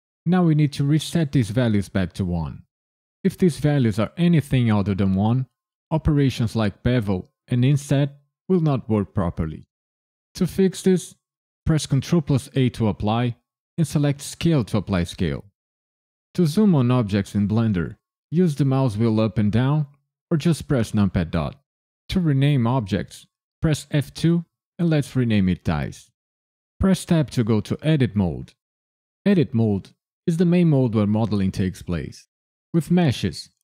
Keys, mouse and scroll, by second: 11.6 ctrl+a, 20.9 KP_Decimal, 21.6-23.4 scroll down 2, 23.9 F2, 27.1 Tab.